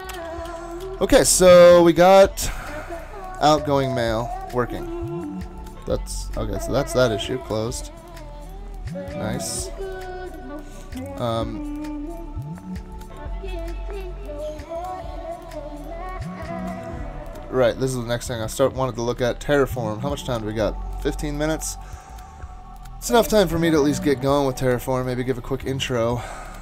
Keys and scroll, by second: 0.2 super+w, 4.2 ctrl+shift+Tab, 25.8 ctrl+shift+Tab.